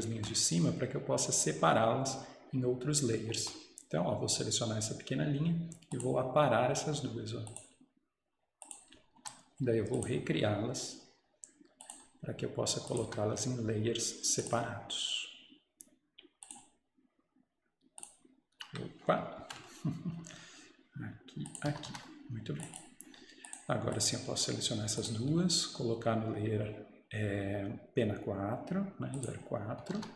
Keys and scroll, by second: 9.1 Escape, 9.2 Escape, 13.1 Escape, 19.4 ctrl+z, 21.8 Escape, 21.9 Escape, 29.9 Escape, 30.0 Escape.